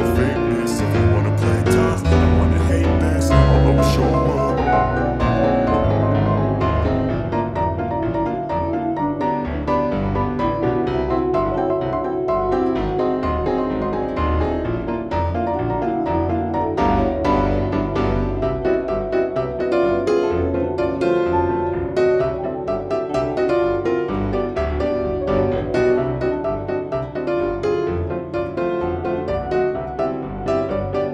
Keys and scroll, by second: 0.1 Escape, 0.3 F4, 1.4 F2, 3.5 F4, 5.3 e, 5.9 shift+F2, 6.3 Escape, 11.9 Escape, 15.1 F4, 16.3 F4, 17.2 Escape, 19.1 shift+F2, 19.3 F3, 26.6 F4, 27.5 Escape, 27.7 F4.